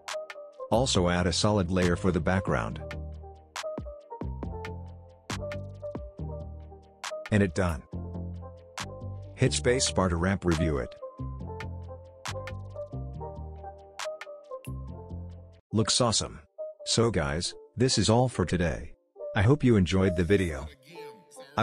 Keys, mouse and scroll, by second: 0.5 right click, 1.2 click, 3.8-4.8 typing, 4.9 Return, 6.4-7.0 drag, 9.4 space, 14.1-14.9 scroll down 1, 14.9 click, 15.7-16.7 scroll down 1, 16.7 click, 17.1 space, 20.2 space, 21.3 click.